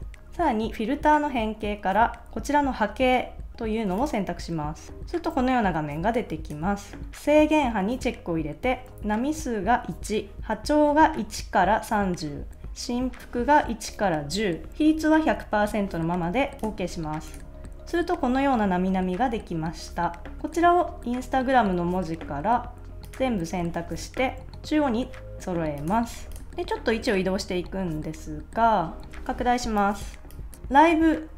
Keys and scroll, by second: 26.1 super+s, 29.3 space, 30.5 super+z.